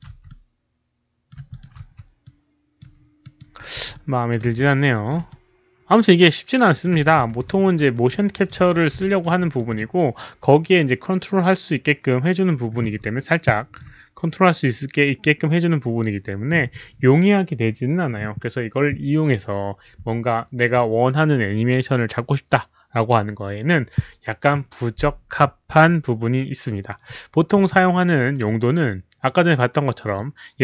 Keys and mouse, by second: 0.1 w, 0.2-1.2 middle drag, 1.2-5.5 typing, 1.4 alt+click, 2.2-2.7 alt+drag, 2.2 middle click, 3.2 alt+click, 3.9-4.3 middle drag, 4.5-5.0 alt+drag, 5.2-6.8 middle drag, 6.8-9.5 typing, 7.4 alt+click, 7.7 alt+right click, 8.0-8.4 alt+drag, 8.5 alt+right click, 9.0 alt+middle click, 9.0 alt+right click, 9.3 alt+click, 10.3-12.7 alt+drag, 12.7 alt+middle click, 12.7 alt+right click, 12.7 q, 12.9-13.7 alt+drag, 12.9 alt+middle click, 12.9 alt+right click, 12.9 q, 13.7 alt+q, 13.7 alt+middle click, 13.7 alt+right click, 14.3-16.5 alt+drag, 21.1 alt+click, 23.6 alt+click, 27.9 alt+click, 28.1 alt+right click, 29.2 alt+click, 30.0 alt+click.